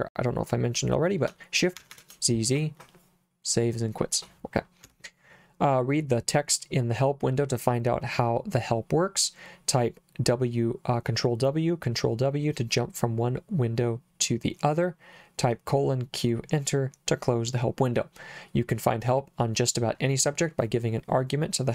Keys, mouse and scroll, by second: 1.8 shift+z, 1.9 shift+z, 4.9 Escape.